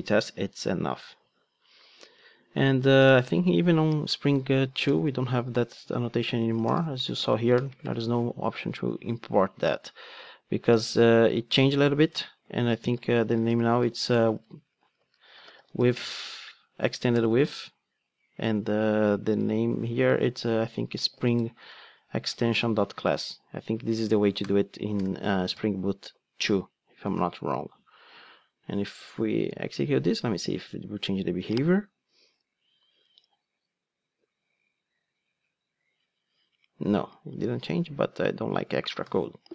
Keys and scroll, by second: 7.1 ctrl+space, 17.2 Return, 22.3 Return, 29.7 ctrl+d, 39.0 super+/.